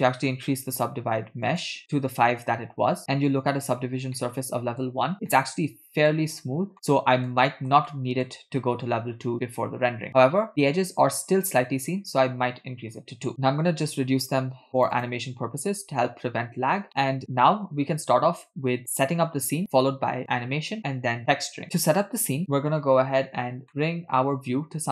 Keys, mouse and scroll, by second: 0.8 click, 1.5 click, 3.3-4.0 scroll up 3, 4.0 scroll up 2, 4.2-5.0 middle drag, 5.1 scroll up 1, 5.4-6.2 shift+middle drag, 7.3-8.3 middle drag, 9.5 scroll up 1, 10.1 shift+middle click, 10.5-10.9 shift+middle drag, 11.1 scroll up 1, 13.3 click, 13.3 scroll down 4, 14.8 click, 15.9-16.2 scroll down 4, 16.9 middle click, 23.7-24.9 middle drag.